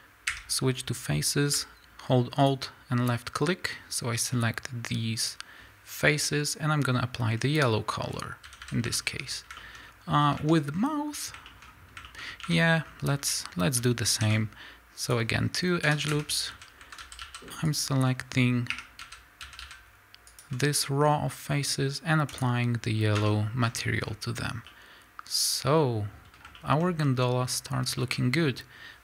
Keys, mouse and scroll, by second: 0.6-2.5 scroll up 2, 2.5 alt+click, 7.8 click, 8.1-8.5 scroll down 2, 8.5 a, 9.0-10.5 shift+middle drag, 9.8-10.2 scroll up 2, 10.2-10.8 scroll down 3, 10.5 Tab, 11.5 shift+middle click, 11.6 scroll up 1, 12.0 shift+middle click, 12.2-12.6 scroll up 1, 12.6 Tab, 12.8 scroll up 1, 13.1-17.8 middle drag, 13.1 a, 14.2 ctrl+r, 16.5 a, 17.8 alt+click, 18.9 3, 19.0 a, 20.4 alt+click, 22.6 click, 23.3 Tab, 23.6 scroll down 1, 24.7-29.0 middle drag.